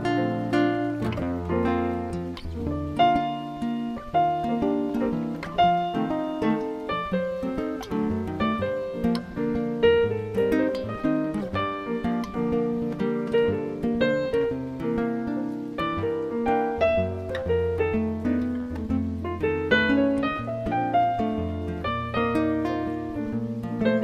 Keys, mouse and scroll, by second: 4.7 middle click, 7.1-8.7 scroll down 15, 8.7 shift+middle click, 10.5 click, 12.2 b, 15.0 p, 18.1 Tab, 18.9-20.8 scroll up 9, 21.4 click, 23.0 click, 23.5 click.